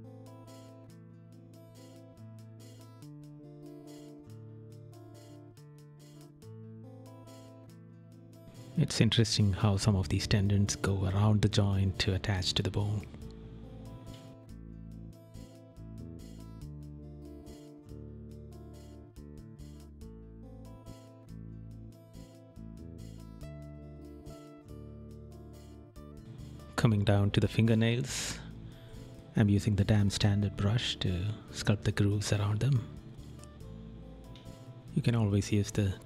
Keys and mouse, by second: 0.6 right click, 4.1 right click, 7.5 right click, 8.6 right click, 11.8 right click, 12.7 right click, 13.8 right click, 15.0 right click, 16.0 right click, 17.0 right click, 18.1 right click, 19.3 right click, 21.1 right click, 22.1 right click, 24.1 right click, 29.9 right click.